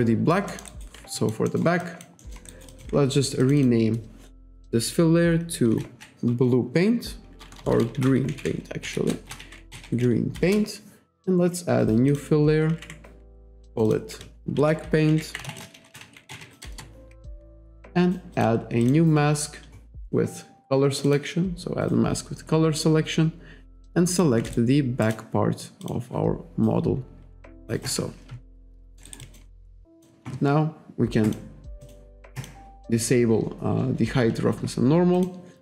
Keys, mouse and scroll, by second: 0.0 alt+click, 0.5 alt+middle click, 0.7 alt+right click, 1.2 alt+click, 1.5 alt+middle click, 1.9 alt+click, 2.2 alt+middle click, 2.7 alt+click, 3.5 click, 5.7 shift+b, 6.4 BackSpace, 7.5-10.4 typing, 12.1 click, 13.4 click, 13.7 click, 14.6-16.9 typing, 18.4 click, 18.9 click, 20.1 click, 21.1 click, 23.9 alt+click, 24.6 shift+right click, 25.9 click, 27.9 click, 28.6 alt+click, 28.9 alt+middle click, 29.1 alt+right click, 29.3 alt+click, 30.0 click, 31.3 click, 31.9 click, 32.4 click, 35.2 click.